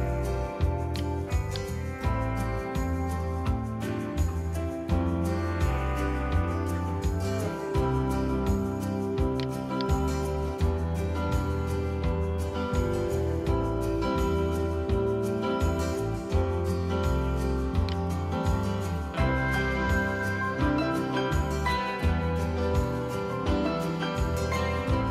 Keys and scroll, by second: 18.8 Return.